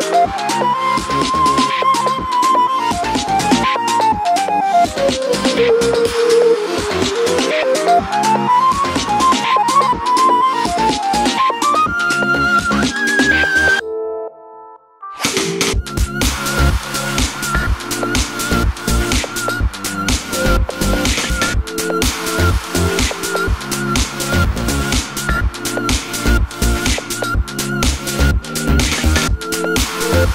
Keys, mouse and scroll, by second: 0.2 click, 0.5 g, 2.3 click, 2.5 r, 3.0 click, 3.1 g, 4.4 click, 5.4 click, 6.0 alt+d, 7.1 r, 7.4 click, 7.5 s, 8.0 click, 8.1 g, 8.7 click, 9.6 click, 9.8 g, 10.2 click, 10.6 alt+d, 10.8 click, 11.2 r, 12.5 click, 12.6 g, 13.6 click, 13.6 s, 14.2 click, 15.5 alt+d, 15.8 click, 16.0 r, 16.8 click, 17.6 click, 18.5 alt+d, 18.8 click, 19.2 r, 19.7 click, 19.8 g, 20.9 click, 21.5 h, 22.5-27.2 middle drag, 24.1-25.3 scroll up 1, 25.3 scroll down 1, 26.9 shift+Tab, 27.2 click, 27.6 click, 27.9 click, 28.5 g, 30.0 click, 30.2 g.